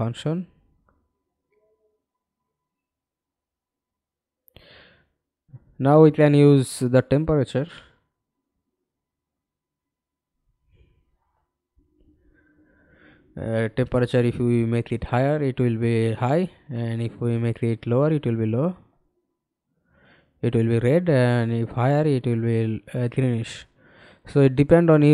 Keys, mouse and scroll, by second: 1.6 middle click, 2.1 f, 2.7 alt+click, 4.9-8.1 scroll down 2, 22.5 double click.